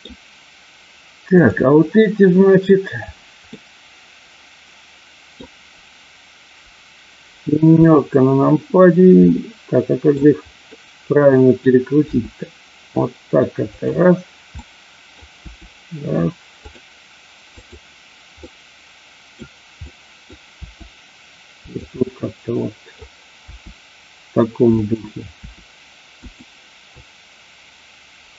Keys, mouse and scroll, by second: 1.4 click, 3.4-5.4 middle drag, 7.6 KP_7, 9.3 middle click, 10.8 middle click, 12.0 r, 13.6 click, 14.5 middle click, 16.5 click, 16.5 r, 18.4-19.4 middle drag, 19.8 middle click, 20.5 r, 21.7 click, 21.9-22.9 middle drag, 24.8 click, 24.8 r, 25.4 r, 26.2 click.